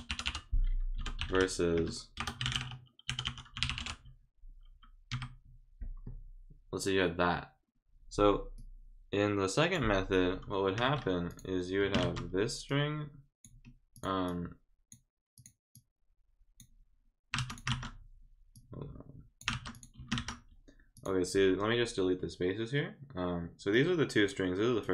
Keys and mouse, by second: 8.6-9.7 drag, 11.3 click, 12.7 click, 13.9 click, 14.3 click, 15.3 click, 15.7 click, 17.5 click, 18.5 click, 19.7 click, 20.0 space, 20.9 click, 23.7 click, 24.8 click.